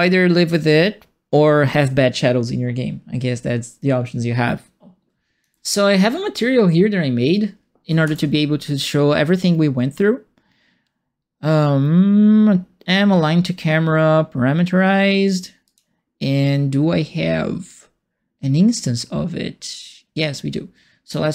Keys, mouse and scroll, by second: 5.1 alt+click, 8.0 ctrl+space, 15.6 click, 20.2 click.